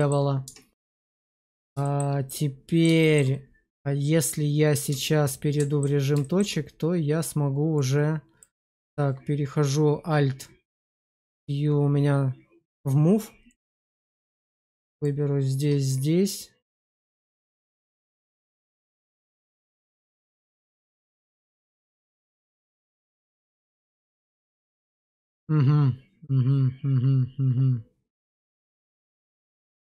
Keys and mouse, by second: 0.3 Tab, 1.3 middle click, 1.7 shift+middle click, 2.2 middle click, 2.9 shift+middle click, 4.8 Tab, 5.2 alt+middle click, 6.1 shift+middle click, 7.7 click, 8.5 click, 11.0 alt+q, 13.4 click, 14.9 shift+click, 16.8-18.1 drag, 18.2 ctrl+z, 19.1-29.8 middle drag.